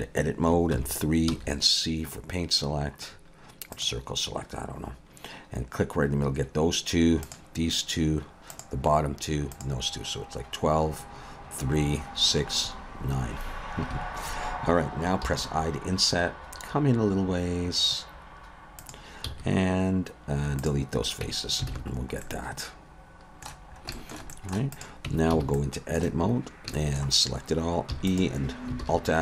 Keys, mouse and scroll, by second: 0.7 3, 1.3 c, 15.3 i, 19.3 x, 21.2 Tab, 21.7 alt+a, 21.9 scroll down 3, 22.2 middle click, 23.7 scroll up 2, 23.9 shift+middle click, 24.3 middle click, 24.7 click, 25.1 Tab, 25.3 a, 25.5 middle click, 26.7 shift+middle click, 27.9 e, 28.8 alt+s.